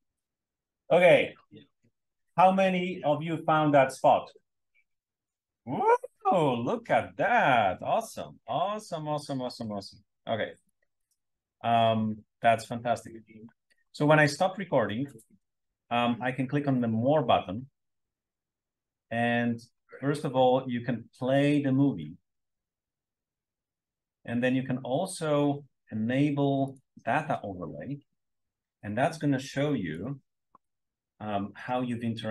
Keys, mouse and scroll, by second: 0.0 m, 9.5-9.9 scroll down 2, 10.6-10.9 drag, 13.6 scroll down 2, 16.9 click, 20.0 click, 26.6 click, 28.2 scroll up 1, 29.8 click, 30.6-31.5 drag.